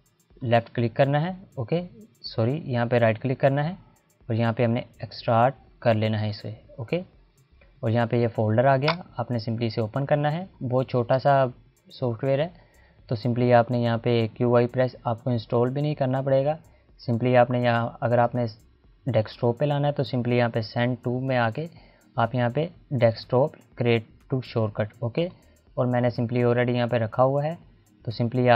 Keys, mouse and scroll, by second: 0.5 right click, 5.9 click, 8.5 click, 17.1 right click, 25.2 right click, 25.3 click.